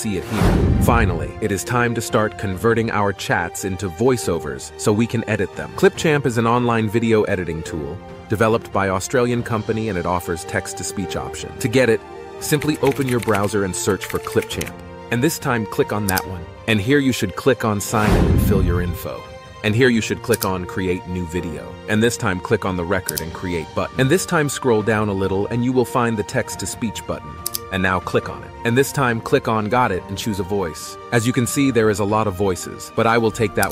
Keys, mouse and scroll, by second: 11.2-15.0 typing, 15.1 Return, 27.6 click.